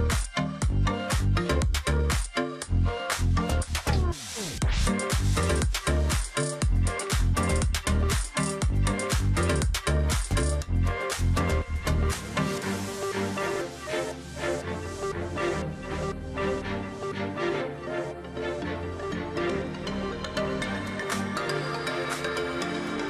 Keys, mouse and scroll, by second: 1.2 space, 1.8 ctrl+z, 2.3 space, 4.2 ctrl+click, 5.3 shift+click, 6.4 alt+click, 6.7 ctrl+click, 6.9 alt+scroll down 1, 7.2 space, 7.5-8.0 alt+scroll up 1, 8.6 ctrl+click, 8.8-9.2 alt+scroll up 1, 10.1 ctrl+z, 10.7 space, 11.7 space, 12.0 double click, 12.1 space, 12.7 double click, 14.1 ctrl+click, 15.0 ctrl+click, 16.3 shift+click, 17.4 alt+click, 17.6 ctrl+click, 17.8-18.1 alt+scroll down 1, 18.1 space, 19.7 alt+scroll down 1, 19.9 space, 20.5 ctrl+click, 20.7 alt+scroll up 1, 21.3 space.